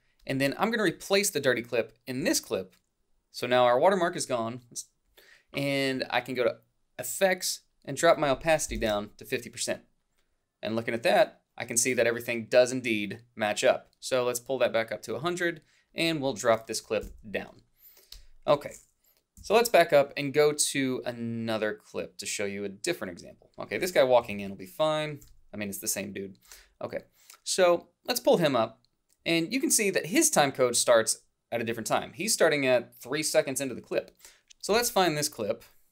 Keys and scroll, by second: 8.7 5, 17.1 alt+Down, 19.4 -, 24.3-26.6 typing.